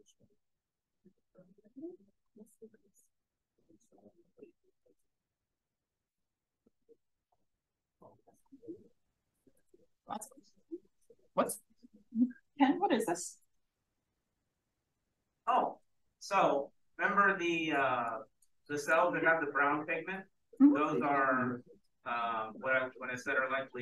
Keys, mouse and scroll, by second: 2.0 click, 3.1 click, 4.7 click, 6.0 click, 6.0-13.4 scroll down 1, 6.6-7.0 drag, 7.3-7.8 drag, 7.9 drag, 13.4-18.0 scroll down 1, 18.0 click, 18.0-20.5 scroll down 1, 18.5 click, 20.5 click, 20.5-22.7 scroll down 1, 22.7-23.8 scroll down 1.